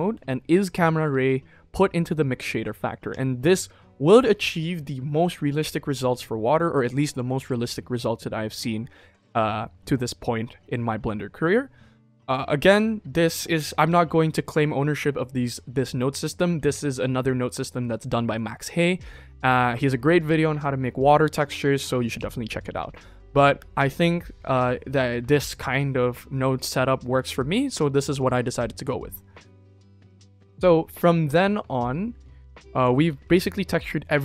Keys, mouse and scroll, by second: 17.1-17.6 middle drag, 18.2-18.8 middle drag, 19.7-20.1 middle drag, 32.3 click.